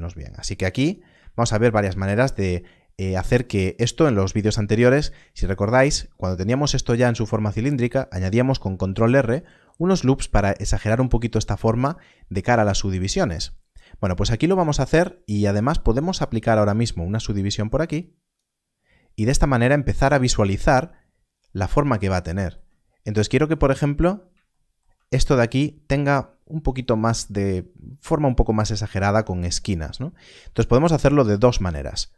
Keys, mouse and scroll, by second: 3.6 click, 13.0 click, 15.1-15.4 scroll down 1, 16.1-20.4 scroll down 1, 20.4 click, 20.6 scroll up 1, 21.2-21.5 scroll down 1, 23.8-24.6 scroll up 2, 24.7-25.0 shift+scroll down 1, 25.0 shift+scroll, 25.1 scroll up 1, 26.6 click, 30.6 click, 31.4 scroll up 1.